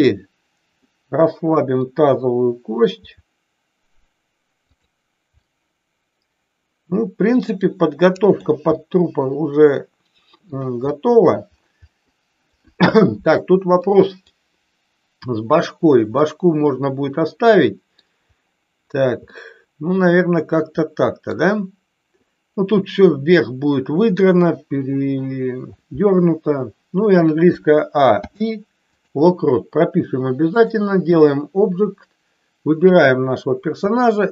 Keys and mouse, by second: 0.9-1.9 middle drag, 3.0 r, 4.6 click, 5.4-8.4 middle drag, 8.8-10.4 middle drag, 10.8 middle click, 12.0-12.5 middle drag, 13.8-14.1 middle drag, 16.1-18.0 middle drag, 19.3-21.4 middle drag, 27.5 a, 28.0 i, 30.5 click, 32.9 click.